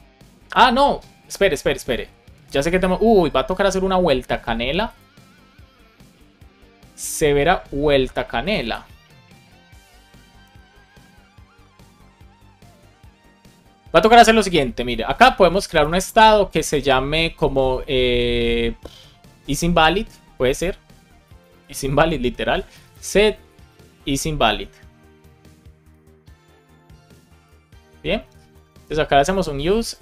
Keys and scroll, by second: 14.8 Return, 15.8 space, 21.2 shift+i, 22.4 space, 23.4 shift+i, 25.5 shift+\, 27.1 Right, 27.3 Return, 27.9 Up, 28.1 super+Right, 28.4 space, 29.9 shift+s.